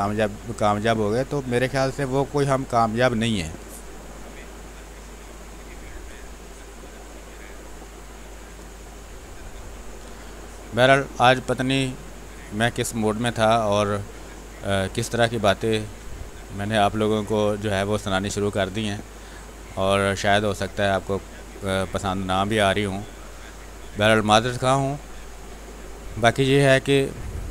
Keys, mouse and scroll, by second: 1.1-2.5 drag, 2.5 click, 2.8 space, 3.1 click, 3.4 space, 4.1-5.9 drag, 6.2 space, 6.4 click, 6.7 space, 7.6-14.8 drag, 14.8 space, 15.0 click, 15.3 space, 16.4 click, 16.8 space, 16.9 click, 17.3 space, 18.4 click, 19.4 space, 19.6 click, 19.9 space, 20.5-23.8 drag, 23.8 space, 24.0 click, 24.3 space, 25.7-27.5 drag.